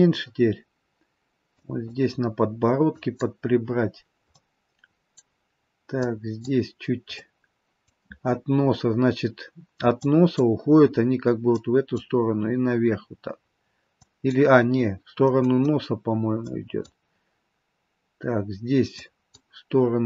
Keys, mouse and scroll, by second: 0.4-0.9 scroll up 2, 1.7 click, 3.1 click, 4.2 middle click, 6.1 click, 7.2 middle click, 10.2 click, 11.7 click, 14.1 click, 15.2 middle click, 16.6 click, 19.1 click.